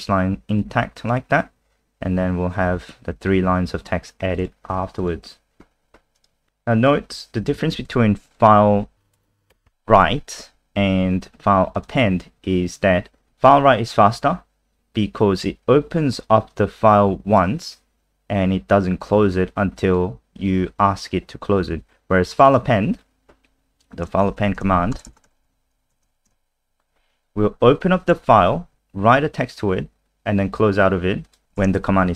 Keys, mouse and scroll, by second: 0.6 click, 5.8 alt+F4, 6.2 click, 6.5-6.9 scroll down 5, 6.9 click, 7.6 ctrl+c, 7.8 click, 9.5 ctrl+v, 11.8 click, 11.9 click, 16.5 click, 22.5 click, 24.3 Up, 24.6 Return, 24.7 Up, 24.9-26.6 typing, 31.2 click, 31.5 shift+Home.